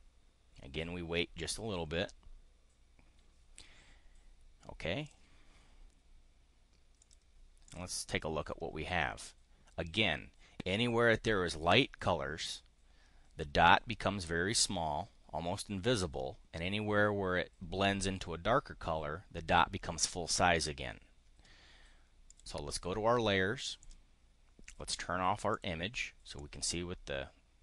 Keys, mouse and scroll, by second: 5.0 click, 7.0 click, 7.4 click, 22.2 click, 23.8 click, 25.5 click, 26.3-27.6 drag.